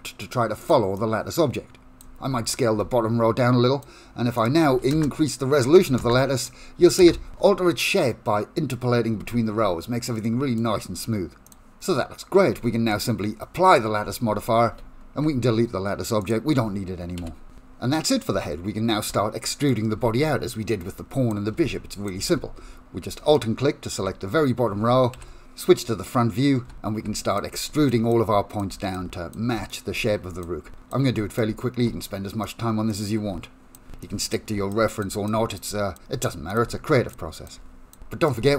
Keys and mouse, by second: 0.7 click, 1.0-2.1 drag, 2.9 s, 4.4 click, 5.5 click, 6.4 click, 7.7-9.0 middle drag, 9.3 Tab, 9.6 Tab, 10.3 middle click, 11.5 click, 12.6 Tab, 13.0 click, 14.8 ctrl+a, 16.3 click, 17.2 Delete, 18.0 middle click, 18.3 Tab, 18.4 middle click, 18.9 middle click, 19.2 click, 19.5 shift+middle click, 20.0 g, 20.8 s, 21.6 g, 22.2 middle click, 22.3 KP_Decimal, 22.8 middle click, 23.2 Tab, 25.2 KP_1, 27.1-35.7 typing, 36.7-38.5 typing.